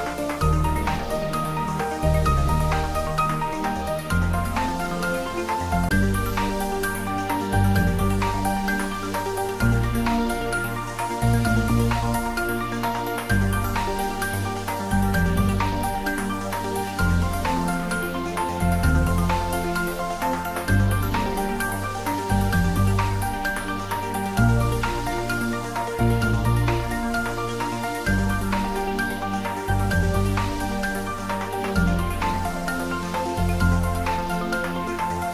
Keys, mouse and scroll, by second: 2.6 click, 5.8-6.9 scroll up 1, 8.4 Tab, 11.3-12.7 scroll up 1, 18.0-20.3 drag, 20.3-25.1 drag, 34.4-35.3 drag.